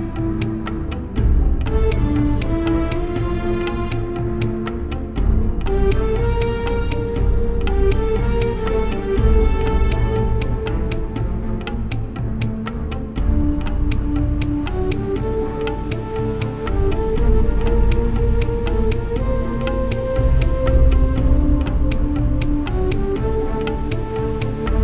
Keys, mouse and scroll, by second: 1.5 ctrl+b, 2.8 click, 3.8 Return, 4.4 BackSpace, 4.6 BackSpace, 5.1 BackSpace, 6.3 Tab, 6.6-8.7 middle drag, 8.8 ctrl+s, 13.6 Tab, 16.7-17.7 right drag, 17.3 ctrl+x, 17.5 middle click, 19.4 ctrl+x, 21.0 Tab.